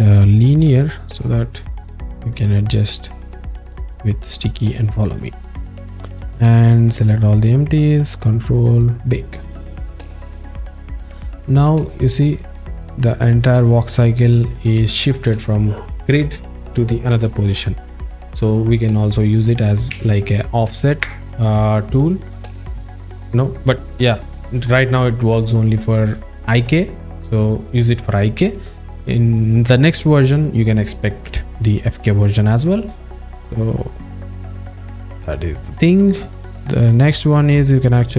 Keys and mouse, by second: 0.6 click, 1.2 click, 11.5 click, 32.4 alt+shift+middle click, 33.1 ctrl+alt+middle click, 33.6 alt+shift+middle click, 34.3 alt+middle click, 35.8-37.1 drag, 37.5 alt+shift+middle click.